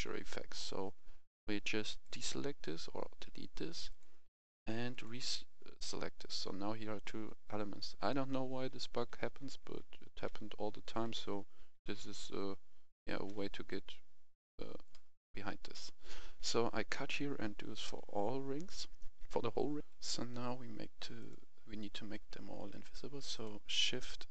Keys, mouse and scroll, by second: 7.9-15.5 right drag, 9.1-11.4 typing, 16.7 typing, 19.7 click, 20.0 F10, 20.1-21.2 scroll up 1, 21.2 click, 21.8-22.7 scroll down 1, 23.3 shift+click.